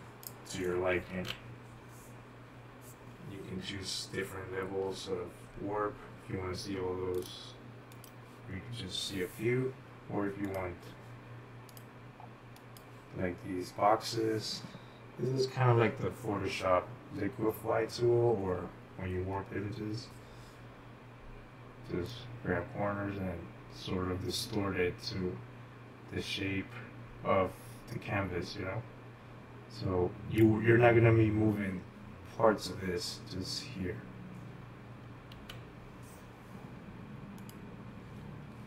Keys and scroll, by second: 2.9 ctrl+z, 36.5 ctrl+z.